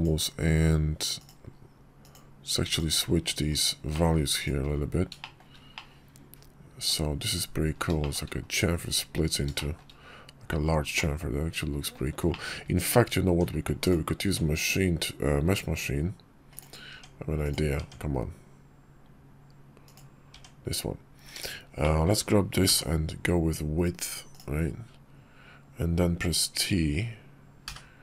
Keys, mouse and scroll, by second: 3.6 middle click, 4.9 shift+middle click, 5.5-6.6 middle drag, 7.7 shift+middle click, 9.3 shift+middle click, 10.7-11.6 middle drag, 12.0 shift+middle click, 13.0 Tab, 13.6-16.3 drag, 16.3 Tab, 17.1 Tab, 17.1 click, 19.6 Tab, 19.6 click, 20.1 Tab, 21.6 shift+click, 22.4 y.